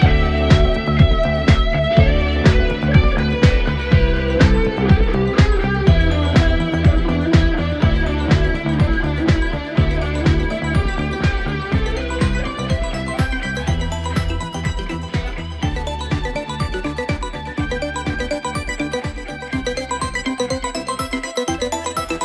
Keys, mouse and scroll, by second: 3.4 click, 3.8-4.2 scroll down 2, 4.2-6.1 middle drag, 6.1 click, 6.5-7.1 scroll up 1, 7.1 KP_1, 8.4 click, 9.0 Tab, 10.7 KP_Decimal, 11.5-12.3 scroll down 7, 12.3-12.6 scroll up 2, 13.1 typing, 13.6-14.1 scroll down 1, 14.1 ctrl+KP_6, 14.3-14.8 ctrl+KP_6, 15.6-16.4 scroll up 1, 16.4 click, 17.2 shift+click, 17.7 shift+click, 18.2 shift+click, 18.8 shift+click, 19.3 shift+click, 19.8 shift+click, 20.4 shift+click, 21.1 shift+click, 21.7 shift+click.